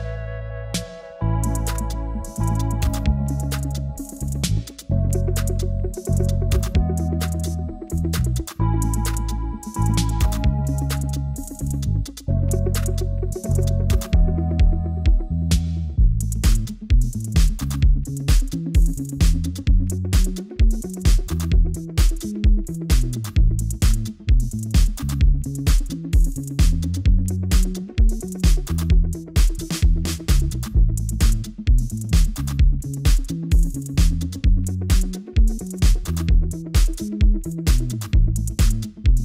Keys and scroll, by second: 4.2 super+BackSpace, 5.8 w, 12.4 super+BackSpace, 14.0 w, 20.7 super+BackSpace.